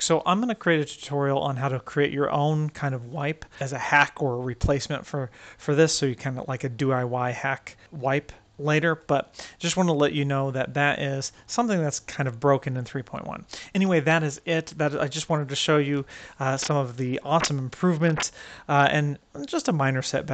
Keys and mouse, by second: 6.3 click, 6.8-7.8 drag, 7.8-8.4 right drag, 16.4 ctrl+middle drag, 16.8 middle drag, 17.6 ctrl+middle click, 17.9 middle drag, 18.3 ctrl+middle click.